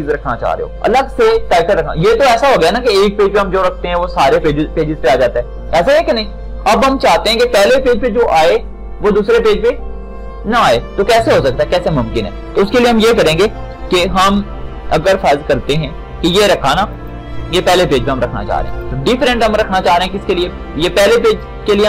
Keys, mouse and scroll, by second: 17.2 shift+click.